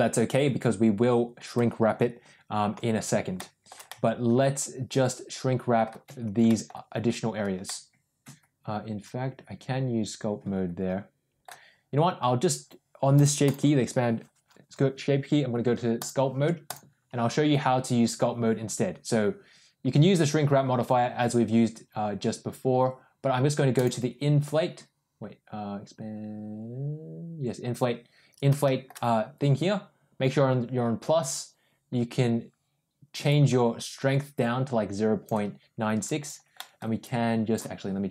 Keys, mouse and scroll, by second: 3.2-3.5 shift+middle drag, 3.7-5.7 middle drag, 6.3 middle click, 7.5-11.3 middle drag, 15.9 click, 23.6 click, 28.5 shift+middle click, 33.1-35.1 drag, 35.9 click, 36.4 middle click, 36.9 click.